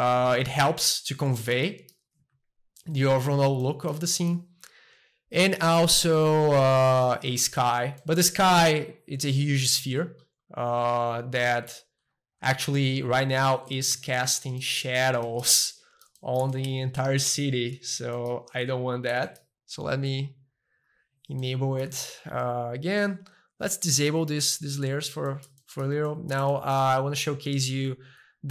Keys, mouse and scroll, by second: 0.0 middle click, 0.6 shift+middle click, 1.6-3.7 shift+middle drag, 4.1-6.1 shift+middle drag, 7.0 click, 8.0-10.5 middle drag, 10.8 middle click, 11.1 Tab, 11.7-13.9 middle drag, 13.9 Tab, 14.2-15.4 middle drag, 15.5 shift+middle click, 16.5-19.1 shift+middle drag, 17.1-18.1 drag, 19.2-20.9 shift+middle drag, 20.8-21.9 drag, 21.9 a, 23.4-25.3 drag, 25.3 middle click, 25.6 shift+middle click, 26.5-28.5 shift+middle drag.